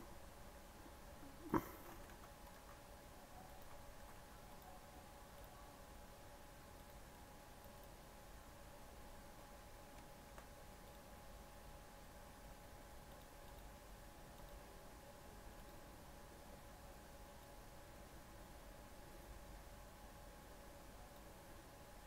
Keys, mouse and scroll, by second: 1.9 g, 2.5 s, 5.3-9.0 drag, 9.0 scroll up 2, 9.3 middle click, 10.3 scroll up 1, 10.8 click, 11.1-11.5 scroll down 3, 13.0-18.5 drag.